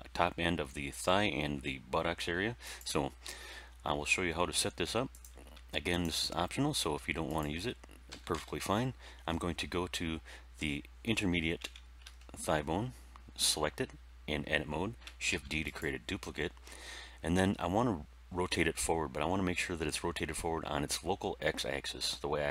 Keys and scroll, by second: 8.0 End, 8.3 Page_Down, 11.5 Tab, 15.2 shift+d.